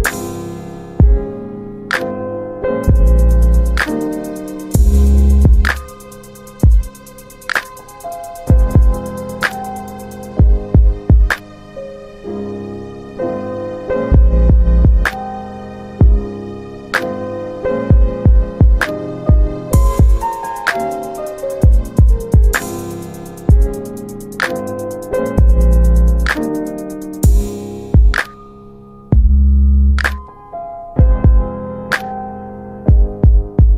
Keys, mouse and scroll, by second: 0.7 ctrl+z, 1.5 s, 2.8 click, 4.3 click, 6.0 Delete, 9.3 click, 14.7 w, 15.6 click, 17.9 1, 19.0 middle click, 20.0 1, 27.0 w, 27.8 alt+middle click, 28.9 middle click, 29.6 alt+middle click, 31.3 alt+middle click, 32.8 click.